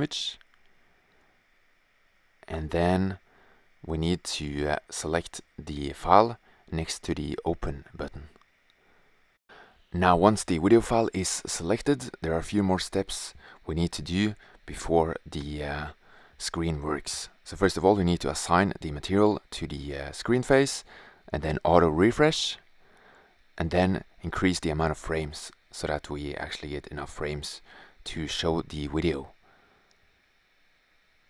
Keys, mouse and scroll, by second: 0.5-1.2 drag, 1.2-8.0 middle drag, 11.3-12.7 drag, 14.2-18.0 drag, 18.0 shift+z, 20.1 click, 21.2-21.5 drag, 21.7 middle click, 23.1 click, 24.4 click, 24.8 click, 25.5 click, 25.9 click, 26.3-26.9 drag, 27.8 click, 28.1 click, 29.1 click, 29.4 click.